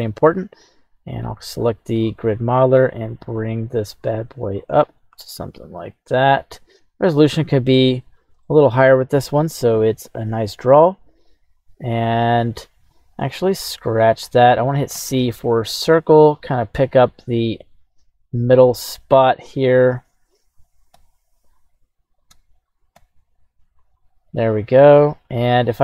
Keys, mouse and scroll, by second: 0.2 q, 7.3-19.9 shift+middle drag, 7.9 scroll, 8.4 scroll up 1.